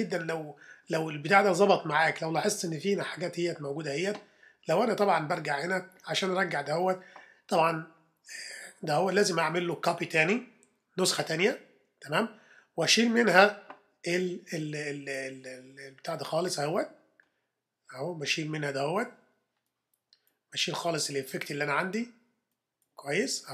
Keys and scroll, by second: 11.1 super+j.